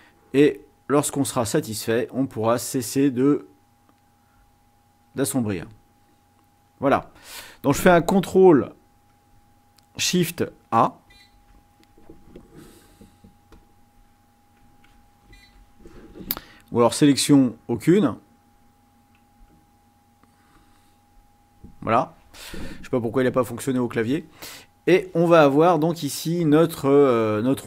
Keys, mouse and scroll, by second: 11.1 ctrl+shift+a, 13.1 click, 13.6 click, 15.2 ctrl+shift+a, 16.8 click, 20.6 click.